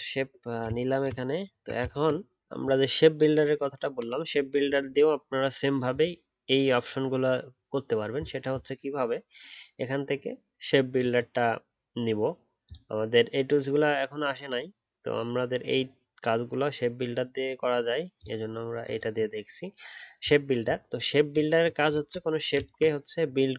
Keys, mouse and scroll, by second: 0.1-0.5 alt+scroll down 1, 0.6 alt+click, 1.4-3.7 alt+scroll up 1, 22.2-23.4 alt+scroll up 3, 23.4-23.5 alt+scroll up 1.